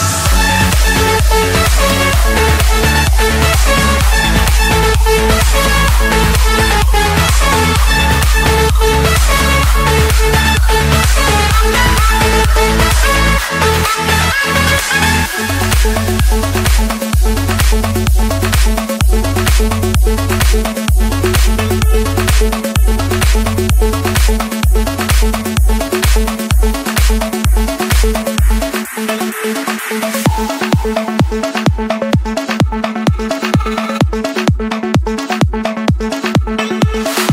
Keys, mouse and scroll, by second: 1.2 click, 2.1 click, 3.1 Return, 3.9 Escape, 5.4 click, 7.2 click, 7.6 scroll, 7.7-8.2 scroll down 7, 9.2 click, 9.6 scroll up 3, 11.5 click, 12.8 click, 13.0 middle click, 13.3 Escape, 14.8-16.1 typing, 17.1 Return, 18.4 click, 19.0 click, 20.5 click, 21.1 click, 21.4 Escape, 23.6 click, 25.2 click, 26.7 shift+click, 28.3 Delete, 29.3 Escape, 30.1 click, 30.8 click, 32.6 click, 33.4 click, 34.4 click, 37.0 click.